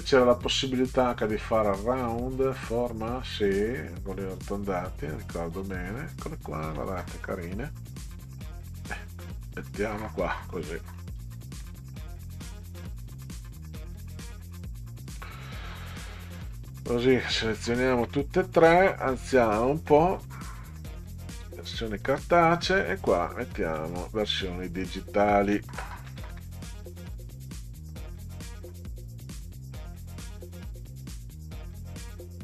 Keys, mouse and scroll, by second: 2.5 click, 4.1-5.2 drag, 6.0 click, 7.5 click, 8.3-9.9 drag, 10.7 middle click, 11.3 ctrl+scroll down 2, 13.3-14.3 drag, 15.9 shift+click, 16.4 shift+click, 17.0 shift+click, 17.7 shift+click, 19.1-20.7 drag, 22.0 click, 22.3-22.7 scroll up 2, 23.1 click, 23.9 click, 24.7 click, 26.1 ctrl+c, 26.3 ctrl+v, 28.5-31.1 drag, 31.8 click, 32.0 click.